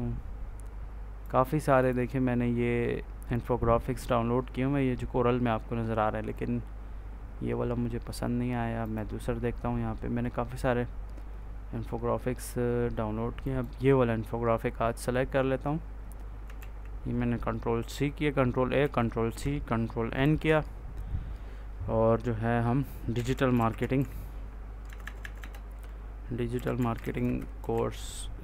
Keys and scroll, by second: 16.5 ctrl+a, 18.7 ctrl+c, 20.1 ctrl+n, 22.8-24.7 typing, 26.2-28.4 typing.